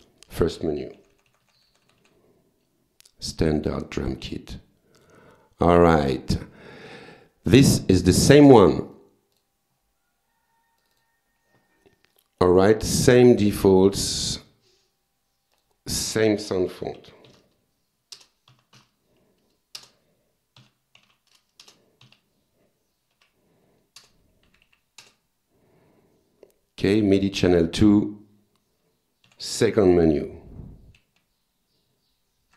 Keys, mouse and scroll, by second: 1.0 Page_Down, 3.5 click, 5.0 click, 6.3 click, 8.4 click, 8.9 right click, 9.4 click, 10.8 click, 12.1-12.7 drag, 13.0-13.4 drag, 13.5 click, 13.9 click, 14.4 click, 15.5 click, 16.0 click, 17.0 u, 17.3 s, 18.2 Return, 18.5 s, 18.8 h, 19.8 Return, 20.4-22.1 typing, 21.6 Return, 23.1 f, 24.0 Return, 24.5 Down, 25.0 Return, 27.2 click, 29.3 Page_Down, 30.5 Up.